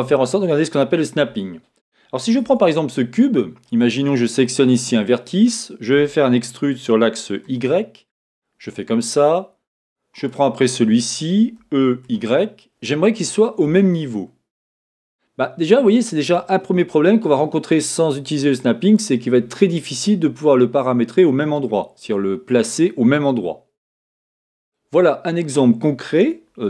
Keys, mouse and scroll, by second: 2.4 Tab, 4.7 click, 5.9 e, 8.7 click, 10.2 click, 11.6 e, 16.3 click, 17.1-23.3 middle drag, 24.8-25.2 scroll up 1, 25.2-26.6 scroll down 1.